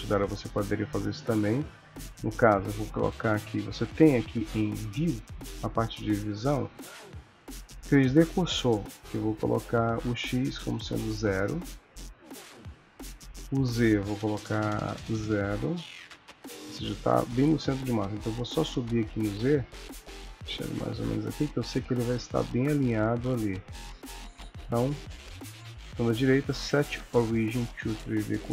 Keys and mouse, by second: 0.1 shift+middle click, 4.5 click, 6.5 middle click, 9.9 click, 13.4 click, 18.9 click, 21.6 click, 22.5 click, 25.4 right click.